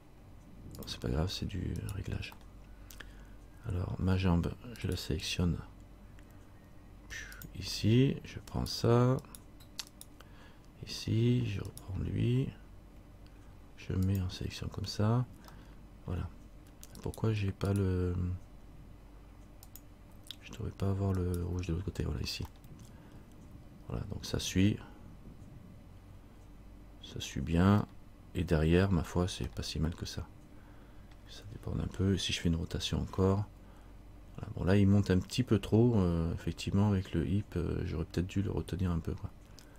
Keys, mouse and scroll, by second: 1.0 click, 2.0 right click, 2.6 middle click, 5.0 right click, 7.5 click, 8.7 right click, 11.9 right click, 14.3 click, 15.8 middle click, 17.2 right click, 19.8 click, 21.4 right click, 22.7 middle click, 28.0 middle click, 29.2 scroll down 1, 29.7 middle click, 32.9 r.